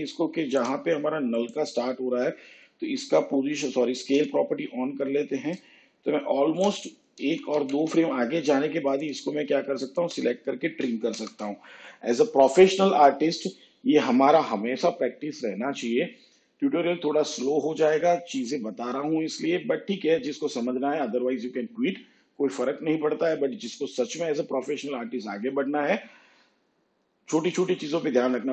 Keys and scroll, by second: 4.1 s, 7.2 ctrl+Right, 11.1 alt+].